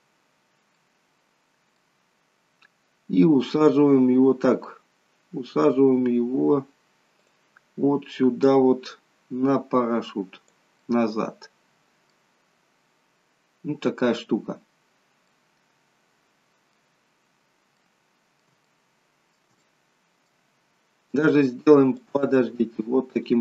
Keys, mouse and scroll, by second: 0.7 middle click, 7.2 click, 8.6 click, 10.8 middle click, 12.4-12.8 scroll up 4, 15.3 middle click, 17.6 middle click, 18.7 shift+middle click, 19.6 middle click, 20.6 scroll down 1, 22.0 click.